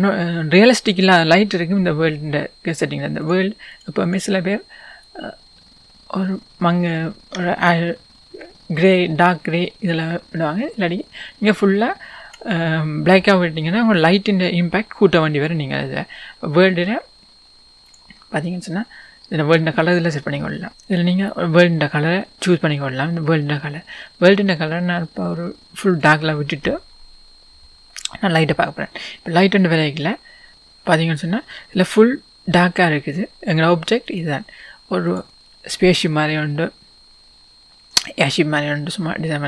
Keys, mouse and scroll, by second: 5.1 click, 13.5-14.3 scroll down 1, 19.6 click, 30.5 click, 31.3 scroll up 1, 31.5-33.0 scroll down 1, 34.1 click, 35.7-36.3 scroll up 1.